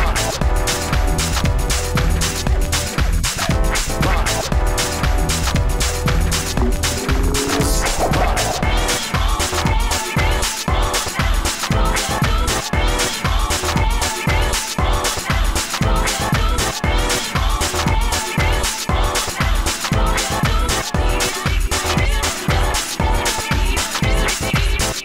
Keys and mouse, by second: 5.4 s, 5.5 f, 6.3 shift+f, 8.9 s, 9.0 f, 9.3 f, 10.6 f, 10.8 s, 11.3 F9, 14.0 ctrl+s, 14.9 g, 16.6 g, 20.4-22.6 typing.